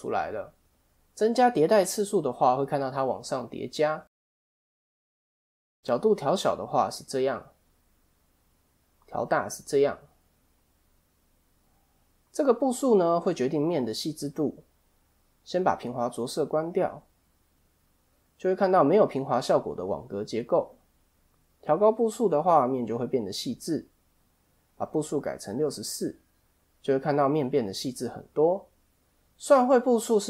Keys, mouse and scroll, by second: 1.1 click, 1.4 click, 1.6 click, 2.1 scroll down 2, 2.3 middle click, 2.8-3.3 scroll down 2, 4.1 click, 4.4 click, 4.5 click, 5.3 middle click, 6.4 click, 9.2 click, 16.2 click, 16.9 middle click, 18.3 scroll up 2, 21.4 click, 23.1 click, 26.6 middle click, 27.8 middle click.